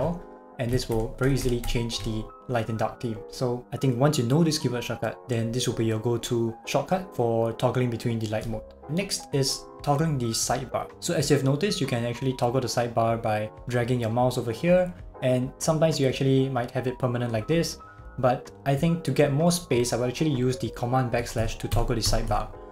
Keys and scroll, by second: 0.9 shift+super+l, 21.4 super+\, 21.7 super+\.